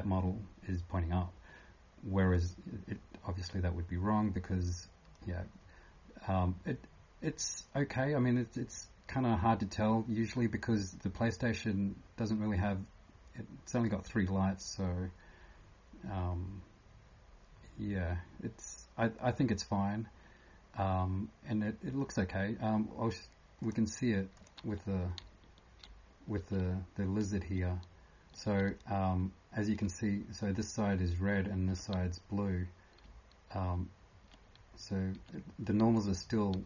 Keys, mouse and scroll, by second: 0.0-29.8 typing, 23.6 click, 31.7 f, 33.0-33.8 typing, 35.9 typing.